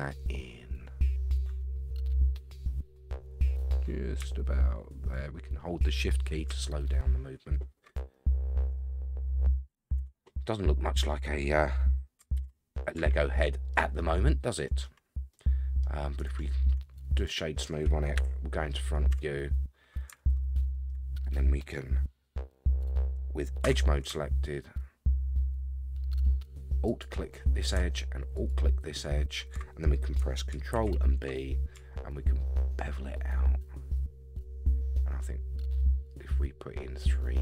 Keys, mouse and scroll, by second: 7.2-7.9 scroll up 4, 8.1 shift+middle click, 10.0 Tab, 10.4 scroll down 1, 10.4-11.3 middle drag, 12.3 alt+z, 12.7-13.2 scroll down 2, 13.2-13.7 shift+middle drag, 13.7 shift+scroll down 1, 13.9-14.8 middle drag, 15.3-15.8 middle drag, 16.2-17.2 right drag, 18.1 KP_1, 19.1 Tab, 20.3 shift+middle click, 21.0 scroll up 2, 23.6 2, 26.8 alt+click, 28.3 alt+shift+click, 30.7 ctrl+b.